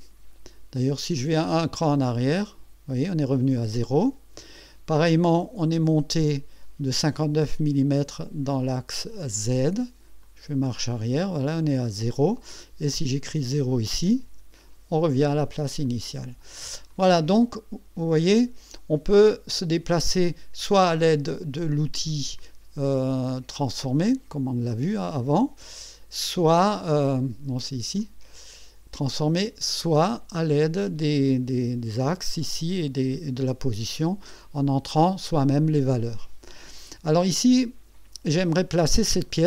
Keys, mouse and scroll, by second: 2.0 click, 10.2 click, 10.8 click, 13.4 click, 14.2 KP_0, 15.9 click, 16.9-20.1 drag, 22.1 right click, 23.2 click, 24.0 right click, 25.0 click, 25.9 click, 26.9 scroll up 1, 28.0 click, 28.4 right click, 29.4 click, 33.1 click, 37.1-38.1 drag, 38.5-39.0 drag, 39.1 click.